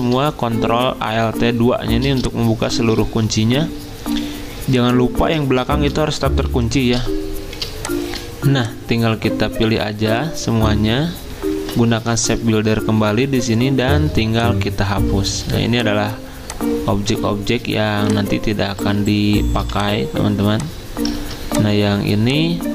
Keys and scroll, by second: 2.8 ctrl+z, 5.5 ctrl+z, 6.5 ctrl+2, 13.9 m, 19.6 v, 21.2 ctrl+z.